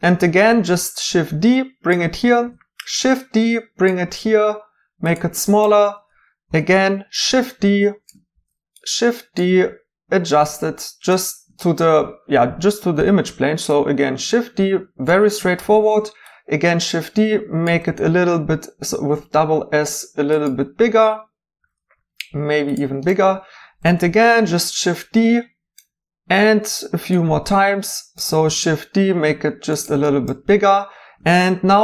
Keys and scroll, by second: 0.3 d, 2.4 d, 4.0 typing, 6.5 d, 8.3 d, 9.5 typing, 13.0 d, 15.6 d, 17.7 typing, 21.6 s, 23.8 d, 26.4 d, 27.5-28.5 typing, 31.5 d.